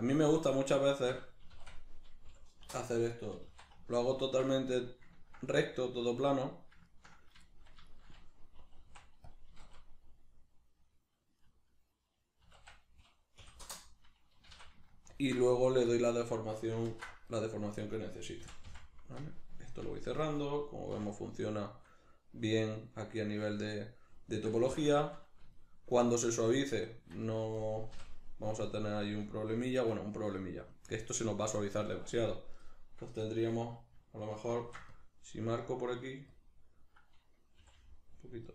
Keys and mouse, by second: 1.4 s, 4.3 ctrl+click, 5.2-6.3 ctrl+middle drag, 6.3 right click, 6.9 ctrl+right click, 7.4 shift+middle click, 7.9 shift+right click, 8.6 e, 9.4 click, 9.5 d, 11.5 right click, 12.4 s, 15.2 ctrl+click, 15.9-17.4 shift+middle drag, 16.8 ctrl+r, 17.7 right click, 18.4 f, 19.6 shift+middle click, 20.2 right click, 20.9 f, 21.4-27.6 shift+middle drag, 27.6 right click, 27.9 l, 29.2-32.6 shift+middle drag, 32.6 right click, 34.6 ctrl+r, 36.4 click, 37.6 g, 38.3 click, 38.4 right click.